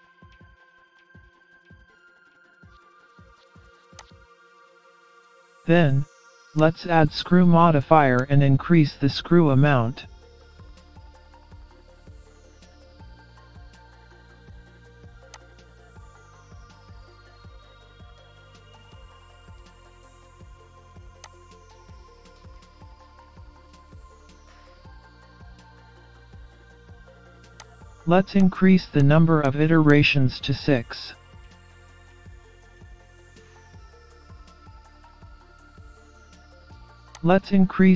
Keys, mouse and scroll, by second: 4.9 middle click, 6.6 click, 9.5 middle click, 10.5-11.1 scroll down 5, 11.2 scroll up 3, 11.7 middle click, 15.4 click, 20.3 scroll down 4, 21.3 click, 25.4 middle click, 27.6 click, 28.4 click, 29.1 click, 29.5 click, 29.9 click, 31.0-31.5 scroll down 5, 31.8 middle click, 33.7 scroll up 2, 34.5 middle click, 37.2 click.